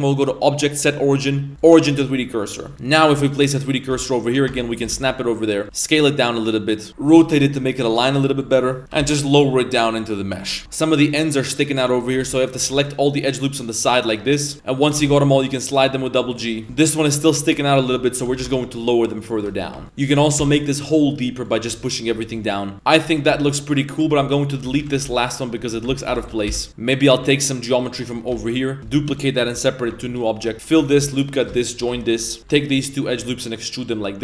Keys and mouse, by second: 2.3 middle click, 2.7 Tab, 2.7 1, 3.3 right click, 3.6 shift+right click, 3.9 shift+s, 4.5 Tab, 4.7 right click, 4.9 shift+s, 5.3 middle drag, 5.6 s, 6.5-6.8 middle drag, 7.1 r, 8.8 g, 10.6 Tab, 10.6 z, 10.8 middle click, 11.8 Tab, 12.2 z, 12.4 alt+right click, 12.8 alt+shift+right click, 13.6 alt+shift+right click, 14.1 alt+shift+right click, 14.4 alt+shift+right click, 14.5 middle click, 14.5 g, 14.9 g, 16.6 shift+middle click, 16.6 shift+a, 17.6 right click, 17.8 shift+middle click, 18.2 g, 19.6 a, 19.8 Tab, 21.8 middle drag, 22.1 Tab, 22.4 middle click, 22.7 Tab, 22.7 z, 22.7 a, 23.2 a, 23.4 middle click, 23.4 a, 24.1 Tab, 24.7 z, 24.8 a, 25.1 b, 26.1 ctrl+l, 26.3 z, 26.5 x, 26.7 1, 26.9 right click, 27.7 right click, 28.4 shift+d, 28.8 g, 29.9 Tab, 29.9 p, 30.1 right click, 30.4 Tab, 30.5 ctrl+z, 30.5 ctrl+f, 30.5 ctrl+r, 30.9 ctrl+r, 31.2 click, 31.4 right click, 31.6 shift+right click, 32.2-34.1 typing.